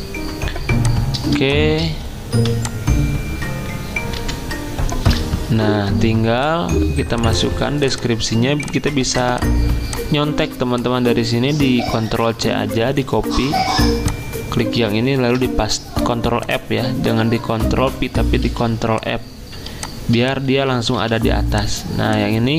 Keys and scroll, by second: 1.4 v, 6.6 F10, 12.1 ctrl+c, 12.9 Escape, 15.2 ctrl+f, 18.5 z, 19.7 v.